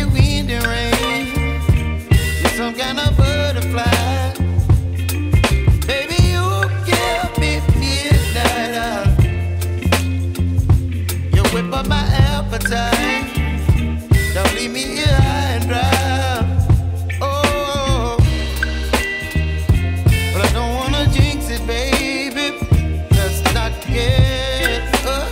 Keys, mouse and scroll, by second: 5.4 ctrl+d, 11.1 Delete.